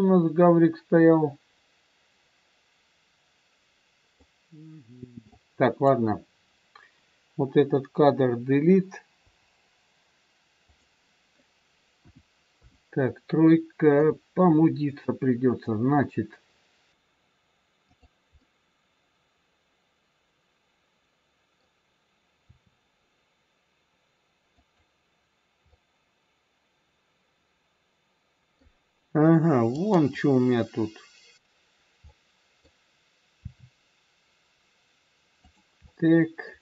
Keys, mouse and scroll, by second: 5.2 click, 9.2 Delete, 11.9 KP_1, 12.5 KP_3, 13.9 KP_2, 14.4 KP_1, 16.4-16.9 scroll up 1, 16.9 middle click, 17.9 click, 18.4 middle click, 22.5 r, 25.6 middle click, 29.6 click, 32.1 middle click, 32.1 scroll up 1, 33.3 r, 35.8 middle click.